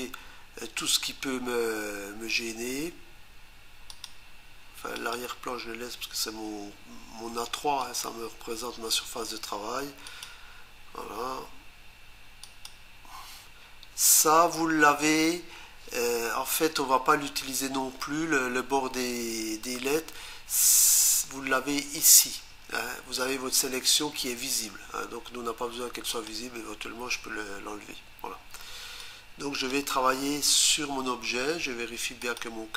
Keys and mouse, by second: 3.9 click, 4.9 click, 7.8 click, 10.1 click, 12.5 click, 22.0 click, 26.1 click, 29.0 click, 32.2 click.